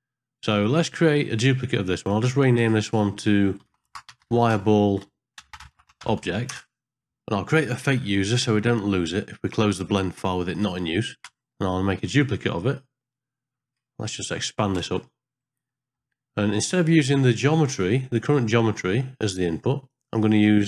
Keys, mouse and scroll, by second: 2.0-6.5 drag, 8.3 click, 14.5 ctrl+click, 15.0 ctrl+space, 15.7 middle click, 16.1 middle click, 17.4-18.7 drag, 19.2 click, 20.1 click.